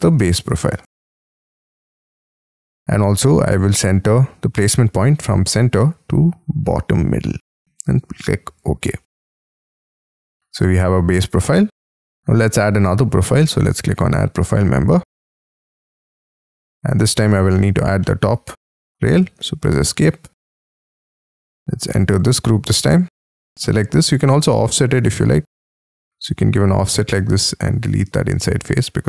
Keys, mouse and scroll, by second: 0.0-1.5 typing, 14.8-16.2 scroll down 26, 16.2 middle click, 16.7-17.4 shift+scroll down 11, 17.5 shift+middle click, 17.9 shift+middle click, 18.4-18.9 scroll down 7, 19.0 Escape, 19.2 Escape, 19.7-22.3 scroll up 54, 22.4 double click, 22.6-23.0 scroll up 6, 23.2 double click, 23.5 scroll down 1, 23.7 scroll up 4, 24.0 f, 27.1 space, 28.0 Delete, 28.9-29.0 scroll up 4.